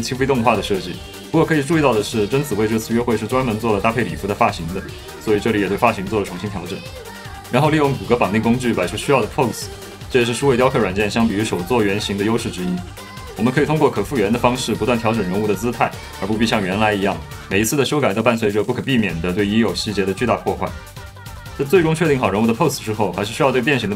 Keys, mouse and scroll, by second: 0.2 middle click, 0.4 alt+middle click, 0.7-2.6 typing, 1.0 middle click, 1.0 click, 1.2 middle click, 1.6 middle click, 1.9 click, 2.1 click, 2.6 click, 2.6 ctrl+middle click, 2.7 middle click, 2.8 middle click, 3.2 ctrl+middle click, 3.3 shift+middle click, 3.4 shift+middle click, 3.7-6.5 typing, 4.8 middle click, 5.1 Tab, 5.2 middle click, 5.4 click, 5.8 click, 5.9 click, 6.8 alt+s, 7.1 alt+s, 7.5 click, 7.6 alt+s, 7.9-12.1 typing, 8.1 Return, 9.6 alt+p, 10.4 Escape, 10.6 alt+g, 11.5 F1, 12.1 F2, 12.4 shift+click, 13.4-18.0 typing, 13.7 Escape, 16.1 click, 17.5 click, 17.7 click, 18.0 click, 19.6-21.4 typing, 20.4 ctrl+middle click, 21.7 middle click, 22.0 middle click, 22.3 middle click, 22.5 middle click, 23.7 middle click, 23.8 middle click.